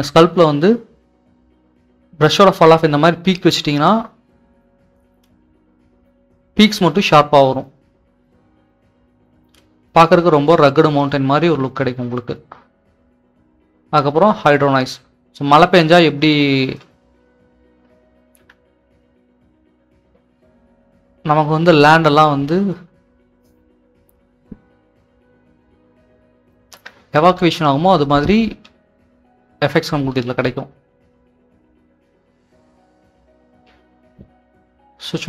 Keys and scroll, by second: 15.7-22.2 typing, 24.8-25.6 typing.